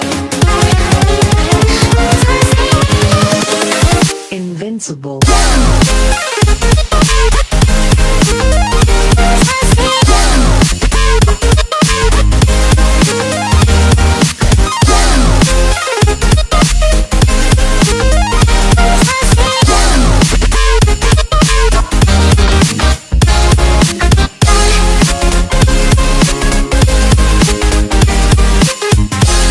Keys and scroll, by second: 1.2 space, 1.8 z, 3.9 x, 7.1 space, 7.3 z, 8.9 space, 11.6 z, 15.4 x, 17.4 x, 19.1 x, 22.0 z, 23.1 space, 23.5 z, 25.6 space, 26.4 space, 27.5 space, 28.1 x, 29.4 space.